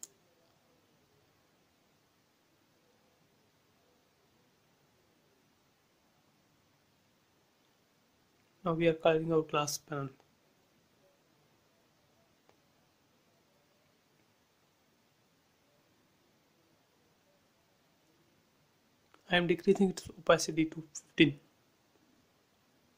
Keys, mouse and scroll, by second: 6.0 ctrl+z, 6.8 space, 7.3 click, 8.7 b, 9.0 click, 9.0 click, 9.8 space, 10.3 click, 12.0 space, 12.4 click, 13.3 b, 13.4 click, 14.0 space, 14.2 click, 15.1 b, 15.3 click, 15.8 space, 16.7 click, 16.8-20.8 drag, 20.8 click, 21.6-22.1 typing, 22.4 Return.